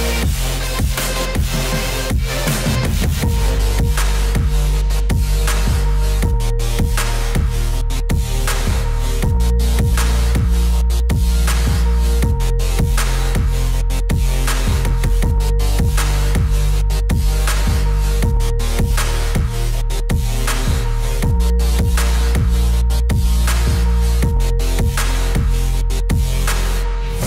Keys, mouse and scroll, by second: 0.6 click, 1.2 click, 2.2 click, 2.8 click, 3.8 click, 4.2 click, 5.3 click, 6.1 click, 6.9 click, 7.5 space, 7.6 click, 7.7 space, 8.0 click, 8.7 ctrl+z, 9.0 click, 9.7 click, 10.4 click, 11.2 click, 11.9 click, 13.5 click, 13.7 ctrl+z, 14.2 click, 14.8 click, 15.8 click, 16.6 ctrl+Return, 17.5 click, 20.8 click, 20.9 ctrl+d, 21.5 z, 21.6 click, 21.7 z, 21.9 click, 22.0 z, 22.2 click, 22.3 z, 23.1 click, 24.4 click.